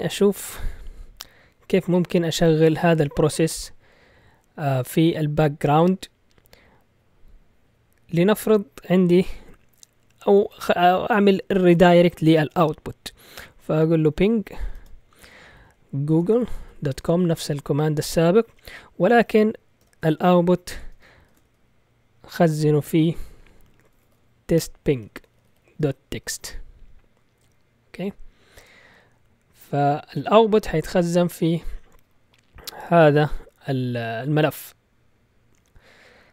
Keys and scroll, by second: 14.2-18.5 typing, 19.8 typing, 20.9-21.4 typing, 23.7-26.9 typing.